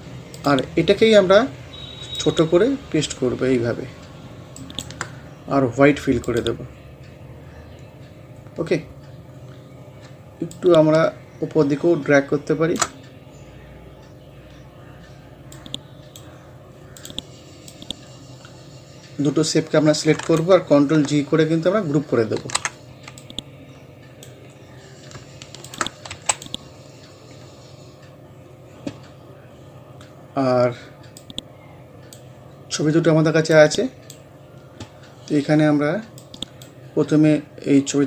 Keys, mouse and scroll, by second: 4.6 shift+right click, 6.3 click, 8.7 scroll up 1, 10.1-10.4 shift+scroll up 1, 10.5-13.3 shift+drag, 13.3 scroll down 1, 14.7 scroll up 1, 15.6-22.4 drag, 22.4 ctrl+g, 23.2-25.7 drag, 26.1 c, 26.3 click, 26.7 scroll down 1, 29.2-30.3 scroll down 1, 30.3 scroll up 1, 31.2-34.5 drag, 34.5 scroll up 1, 36.2-37.7 drag, 37.7 scroll up 1.